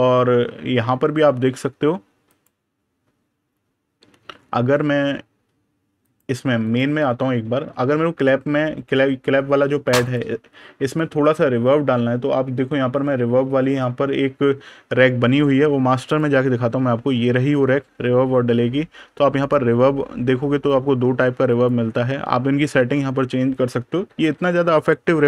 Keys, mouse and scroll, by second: 0.1 super+KP_Add, 9.9 click, 15.9 click, 20.4 click.